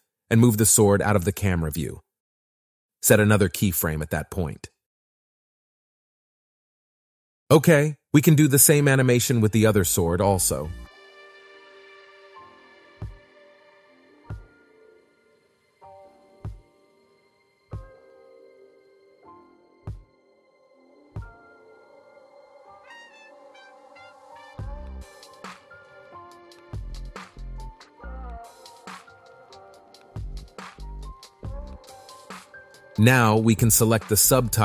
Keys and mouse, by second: 4.6 i, 7.1 space, 8.7 space, 9.4-10.5 drag, 11.0 Up, 11.4 Up, 12.3 click, 14.7 click, 15.1-16.2 drag, 16.2 i, 17.3 click, 17.8 click, 23.1-24.3 drag, 24.6 KP_1, 25.9 click, 27.0 click, 29.0 i, 29.6 space, 33.1-34.1 drag.